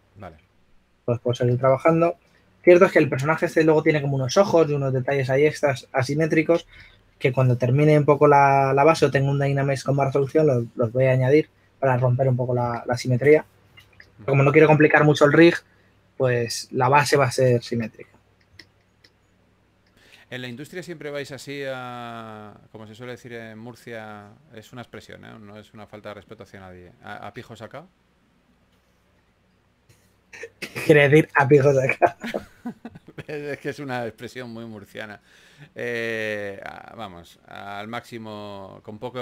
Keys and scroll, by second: 0.0-2.8 typing, 6.5-7.2 typing, 10.0-10.7 typing, 14.0 s, 20.5-21.6 typing, 23.0 s, 24.7-25.9 typing, 29.8-30.2 typing, 32.0-33.2 typing, 36.4 s, 39.0 s.